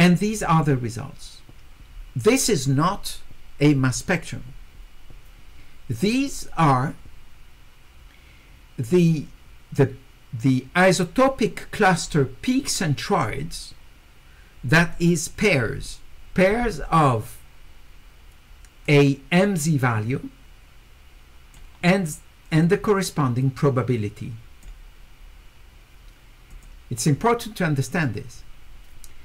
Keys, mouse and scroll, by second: 18.8-21.5 drag, 22.6-24.6 drag, 26.5 click.